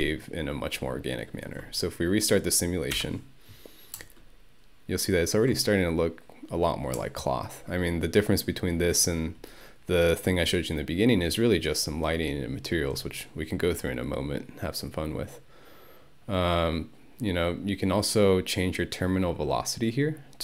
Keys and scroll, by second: 3.0 Home.